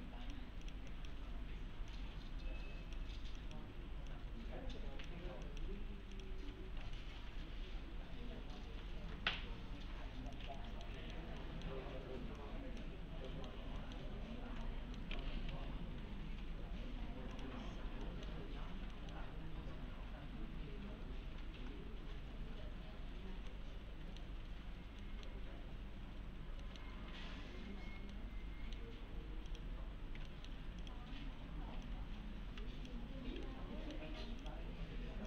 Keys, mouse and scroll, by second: 0.1-0.5 click, 2.2-3.2 click, 7.0-9.5 alt+middle click, 10.3 click, 10.6 alt+middle click, 11.4 alt+middle click, 12.4-13.0 click, 13.0 scroll down 1, 13.3 middle click, 14.6-15.3 alt+middle click, 15.5 v, 17.3 click, 18.1 middle click, 18.6-18.9 scroll up 1, 18.9 middle click, 19.4-21.2 scroll up 1, 23.1-23.5 scroll up 1, 23.5-24.4 middle click, 26.2-26.6 scroll down 1, 26.6 middle click, 28.1-29.1 alt+middle click, 29.5 click, 30.3 alt+middle click, 30.8 click, 32.5 s, 33.5-34.1 alt+middle click, 34.4 click.